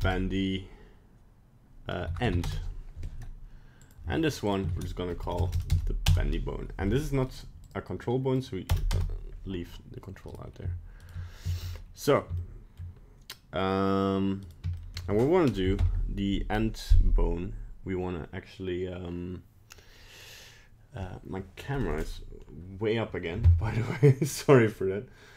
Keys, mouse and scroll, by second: 3.8 right click, 4.4 click, 5.3 BackSpace, 5.5 BackSpace, 7.3 click, 10.3 right click, 11.0 shift+right click, 11.8 middle click, 12.3 shift+middle click, 14.5 right click, 14.7 shift+middle click, 15.7 alt+p.